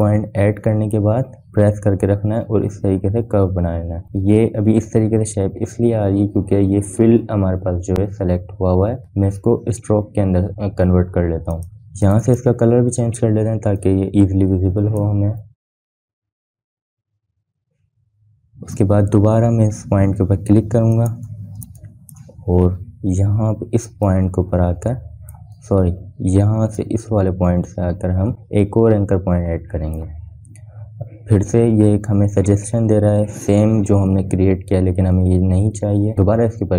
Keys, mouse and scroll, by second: 12.3-18.4 drag, 22.5 click, 23.2 space, 23.3 click, 23.7 space, 25.6-27.1 drag, 27.1 ctrl+z, 28.4-34.1 drag.